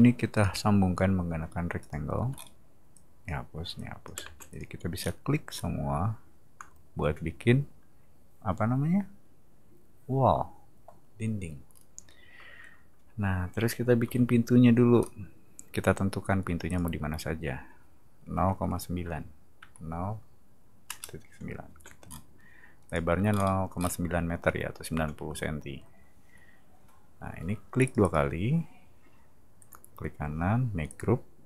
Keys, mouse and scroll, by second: 0.3 click, 1.8 click, 2.2 e, 2.3 middle click, 2.9 click, 3.8 click, 4.2 space, 4.5 click, 4.9-5.6 scroll down 4, 11.7-12.1 middle drag, 14.0 r, 15.0 middle click, 16.6 click, 21.7 space, 22.0-22.8 middle drag, 22.8 click, 23.3 middle click, 23.4 scroll up 2, 23.7-24.4 scroll down 2, 27.8 click, 28.0 click, 29.6 right click, 30.9 click.